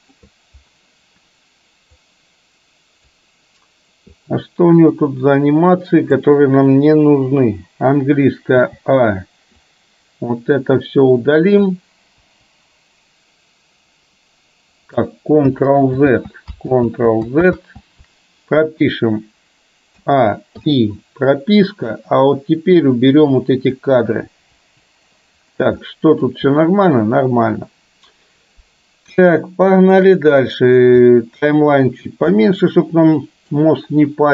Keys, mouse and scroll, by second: 2.1-3.9 drag, 4.2-7.1 drag, 9.6-11.7 drag, 9.6 a, 12.3 Delete, 16.1 ctrl+z, 16.9 ctrl+z, 17.7 ctrl+z, 20.1 a, 20.7 i, 22.1-24.7 drag, 24.7 Delete, 26.1 middle click, 29.4-29.9 shift+middle drag, 31.3-32.3 drag, 32.8 middle click.